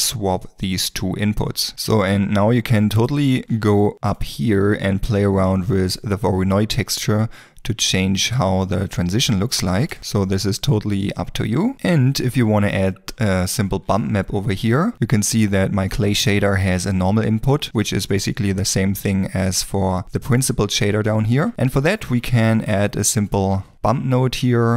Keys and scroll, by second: 22.0 shift+a, 23.7 typing.